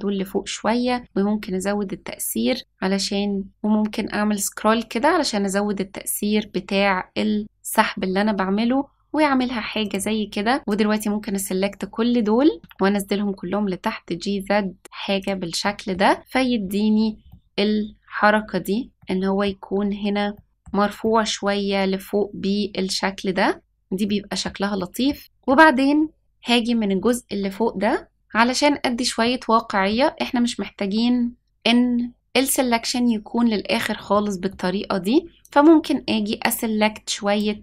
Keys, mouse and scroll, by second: 10.6 click, 12.6 g, 15.6 middle click, 16.3-16.7 scroll down 2, 16.9 scroll up 2, 17.2-18.9 middle drag, 19.0 middle click, 20.3 middle click, 21.0-23.6 middle drag, 24.0 middle click, 24.7 middle click, 25.2-26.1 scroll up 2, 26.2 shift+middle click, 29.2 middle click, 34.1 middle click, 35.4-37.3 drag.